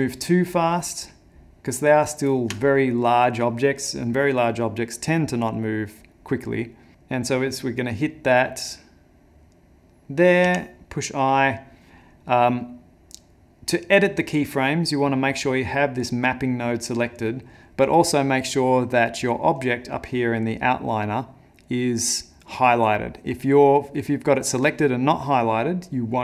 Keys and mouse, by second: 15.8 click, 23.9 click.